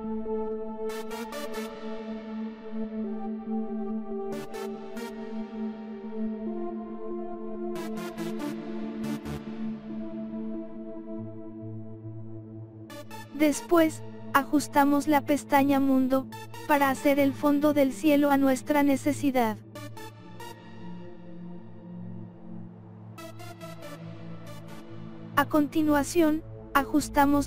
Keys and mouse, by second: 0.8 click, 2.6 click, 4.8 click, 5.8 click, 7.2 click, 9.7 click, 12.4 click, 16.7 click, 17.3 click, 18.8 click, 21.2 click, 21.7 click, 22.3 click, 23.0 click, 23.6-24.7 drag, 27.0 click.